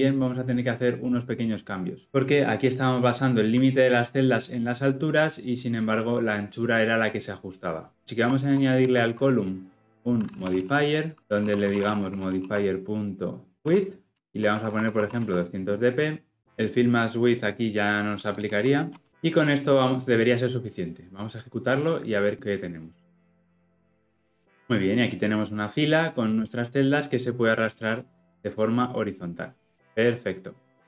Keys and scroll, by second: 21.3 shift+F10.